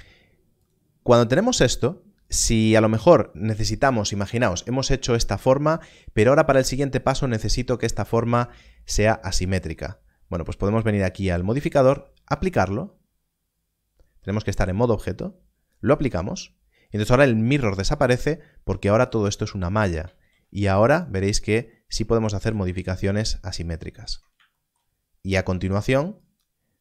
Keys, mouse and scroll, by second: 0.6 click, 4.2 click, 7.7 Tab, 10.9 click, 14.1 click, 17.8 click, 20.1 ctrl+r, 20.9 right click, 21.3 click, 22.3 x, 23.2 click, 23.6 scroll down 1, 24.0 Tab, 26.2 click.